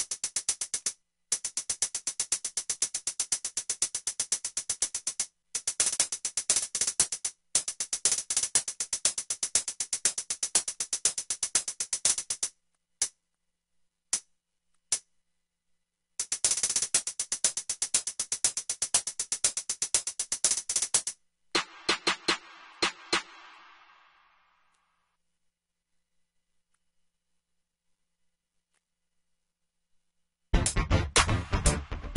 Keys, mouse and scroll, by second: 17.8 F1, 27.2 ctrl+l, 28.8 F5.